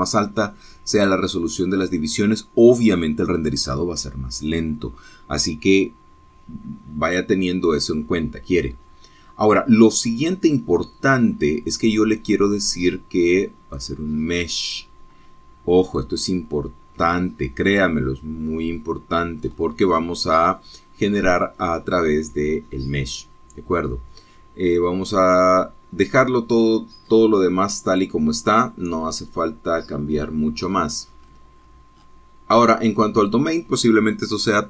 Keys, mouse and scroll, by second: 7.3-7.9 scroll down 3, 9.8-13.2 scroll down 2, 13.3 click, 14.9 click, 19.6-20.3 scroll down 2, 20.6-21.0 scroll up 2, 28.7-30.3 scroll down 3, 30.7-31.1 scroll down 2, 32.4-34.6 scroll up 8.